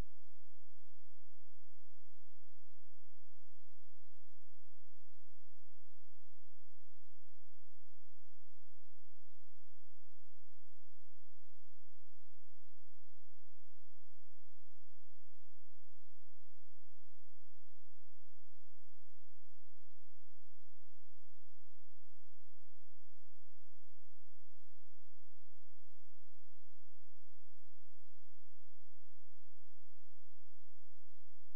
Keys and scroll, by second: 14.0 space, 15.2 ctrl+a, 16.6 ctrl+space, 23.6 space, 26.2 ctrl+space.